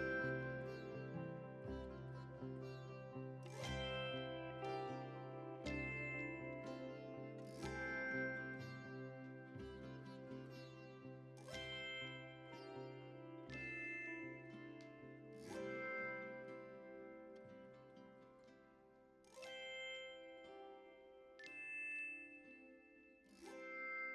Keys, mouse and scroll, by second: 3.2 f, 3.8-6.4 drag, 6.4-8.2 middle drag, 8.2 f, 8.9-12.7 drag, 12.7 ctrl+z, 13.1-16.2 ctrl+drag, 16.2 middle click, 17.0-18.3 shift+drag, 18.3 middle click, 18.5 click, 19.2 ctrl+middle click, 19.7-24.1 drag.